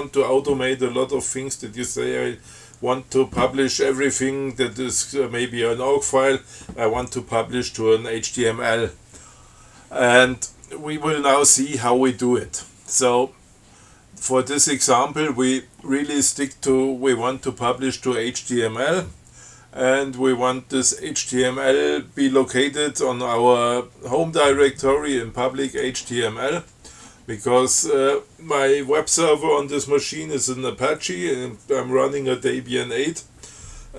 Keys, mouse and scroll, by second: 25.9 click.